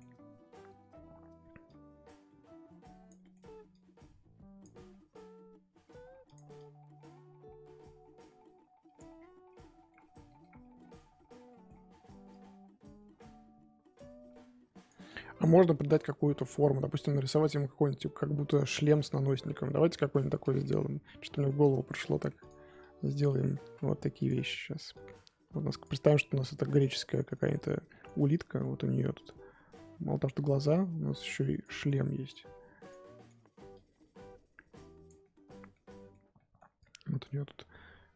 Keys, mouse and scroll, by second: 1.6-3.2 drag, 3.2 middle click, 3.7-4.9 drag, 4.9 middle click, 5.8 f, 6.5-9.1 drag, 9.1-9.5 scroll down 7, 9.5-10.5 middle drag, 10.5-10.8 scroll up 1, 10.8 middle click, 11.1-11.5 scroll up 2, 11.5 middle click, 11.8-12.3 scroll up 1, 12.3-15.4 drag, 15.4 scroll down 3, 15.6 middle click, 16.1 scroll up 2, 16.3-19.2 middle drag, 19.2-20.1 scroll up 2, 20.6-22.1 middle drag, 22.1 f, 22.8 click, 23.6 ctrl+z, 24.2 click, 24.9-26.1 drag, 26.1-29.1 middle drag, 29.1-31.6 drag, 31.6 middle click, 32.3 click, 33.1 middle click, 33.7-35.2 drag, 35.2-36.8 middle drag, 36.8-38.1 drag.